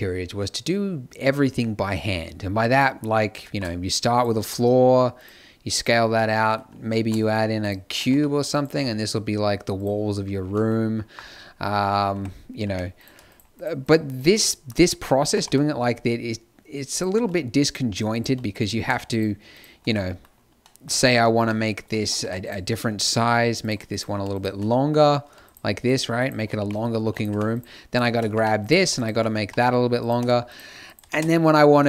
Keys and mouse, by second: 3.4 shift+a, 4.3 s, 6.9 shift+a, 7.9 g, 8.6 s, 12.1 Tab, 12.6 z, 14.4 click, 15.1 z, 15.3 g, 17.1 x, 18.2 z, 19.9-21.3 middle drag, 21.3 Tab, 22.2 Tab, 22.4-28.3 drag, 26.5 g, 27.2 Tab, 28.3 Tab, 29.4 g, 30.1 Tab, 31.0 ctrl+space.